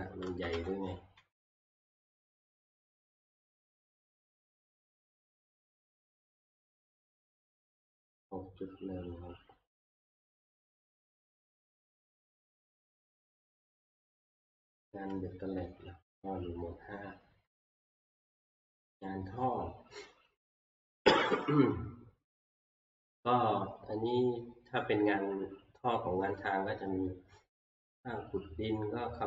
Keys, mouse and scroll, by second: 0.0 click, 1.1 Page_Up, 1.5 Page_Up, 2.6 Page_Up, 2.9 Page_Up, 3.1 Page_Up, 3.6 Page_Up, 3.9 Page_Up, 4.4 Page_Up, 4.7 Page_Up, 5.1 Page_Up, 6.5 Page_Up, 6.8 Page_Up, 9.9 Page_Up, 11.3 Page_Up, 12.3 Page_Up, 13.5 Page_Up, 14.8 Page_Up, 15.5 Page_Up, 17.5 Page_Up, 19.0-20.6 middle drag, 19.0 scroll.